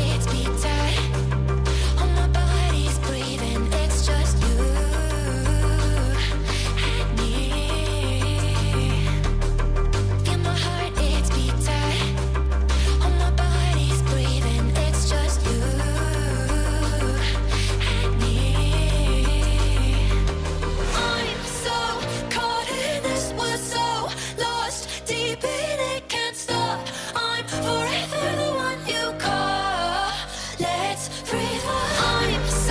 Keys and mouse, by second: 1.1 click, 1.6 g, 2.7 r, 4.5 g, 5.8 g, 8.7 click, 9.5 g, 10.9 g, 12.4 ctrl+z, 12.8 g, 14.1 g, 16.5 g, 17.1 r, 18.1 g, 21.3 a, 21.7 i, 23.6 click, 24.8 g, 28.2 g, 30.5 g.